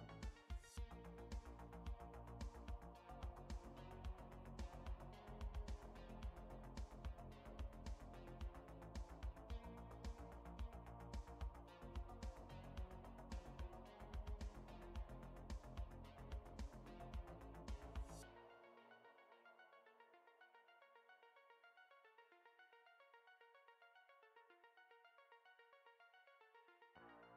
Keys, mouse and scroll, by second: 0.2-0.8 scroll up 2, 1.2 shift+middle click, 5.1 click, 6.7 click, 8.1 shift+middle click, 9.1-9.5 scroll up 2, 9.8 shift+middle click, 9.8 scroll up 1, 10.8-11.3 scroll up 1, 11.3 scroll down 1, 14.8 alt+z, 15.7-16.2 scroll up 1, 16.2 scroll down 1, 17.8 click, 18.8 click, 20.2 KP_Decimal, 21.4 scroll up 1, 21.9 scroll up 1, 22.4 shift+middle click, 23.8-25.0 scroll up 2, 25.8 click, 26.5 middle click, 26.5 scroll up 1.